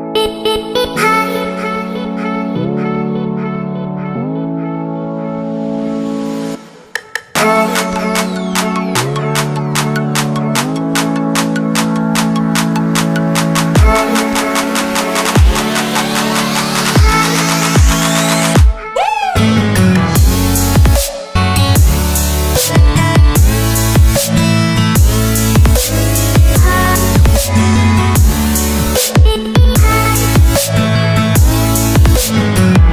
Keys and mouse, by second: 3.2 typing, 4.0-4.9 drag, 5.8 click, 7.0-8.0 drag, 9.0 click, 9.9 click, 11.7-13.5 drag, 14.4 click, 15.4-16.2 drag, 16.9 click, 18.0-19.4 drag, 19.6 click, 23.4 click, 25.0-27.6 drag, 28.8-30.4 drag, 31.8 click.